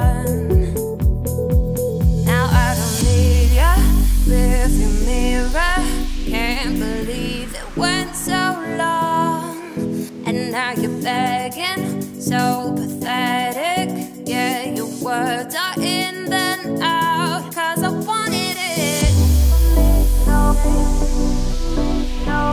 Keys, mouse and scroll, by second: 0.7 scroll up 1, 1.1 click, 1.4 shift+middle drag, 1.6-1.9 scroll up 1, 2.5-6.1 drag, 8.5 z, 10.0 drag, 17.7 click, 18.2-19.0 scroll down 1, 19.0-19.8 shift+middle drag, 19.8-20.7 scroll down 1, 20.7-21.2 scroll down 1, 21.2 shift+s, 21.7 shift+a.